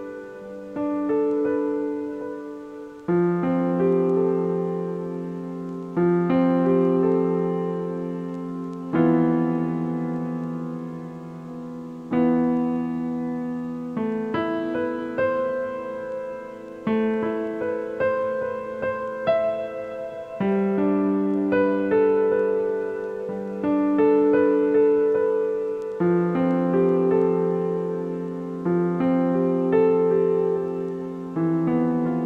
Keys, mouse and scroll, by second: 4.7 click, 6.5 shift+click, 9.5 ctrl+j, 15.6-17.0 drag, 23.7 click, 24.8-26.3 drag, 30.9-31.3 scroll up 1, 31.3 a, 31.5 a.